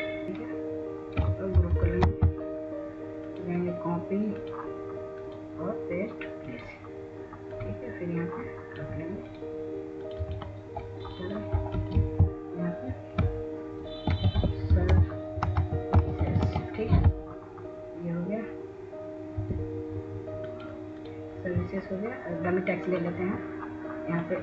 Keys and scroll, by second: 5.1 ctrl+g, 15.3 ctrl+a, 17.4-20.5 typing.